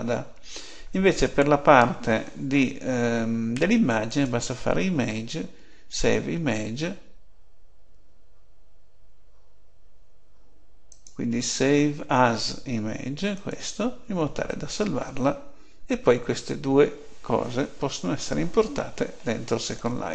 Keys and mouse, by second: 0.0 Escape, 4.0-5.8 drag, 10.8-12.4 drag, 16.0 Escape.